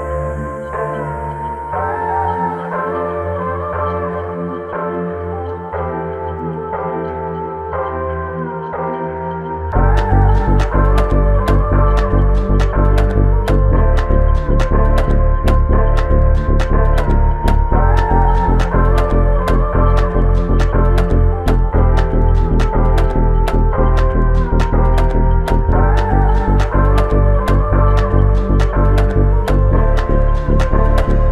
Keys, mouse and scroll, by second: 1.7 Return, 2.4 Return, 8.5 alt+click, 17.1 f.